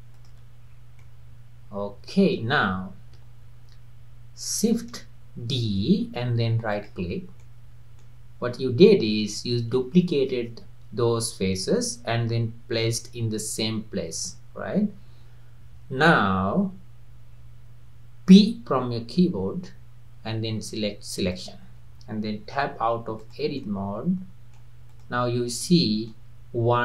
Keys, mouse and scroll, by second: 0.2 shift+click, 0.6 scroll down 2, 1.0-4.2 middle drag, 5.7 shift+d, 7.4-10.6 middle drag, 19.2 p, 22.6 Tab, 23.2 click, 23.6-24.9 middle drag, 24.9 click, 25.7-26.8 middle drag.